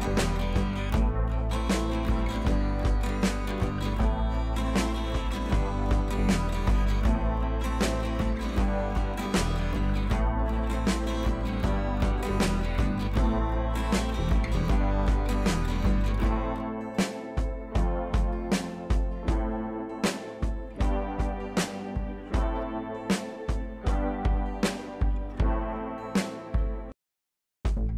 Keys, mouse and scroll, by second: 3.3 shift+click, 4.0 ctrl+e, 4.3 click, 4.7 scroll up 1, 6.2 scroll down 1, 7.6 click, 12.1-14.3 drag, 26.3 ctrl+a, 27.0 click, 27.6 ctrl+d.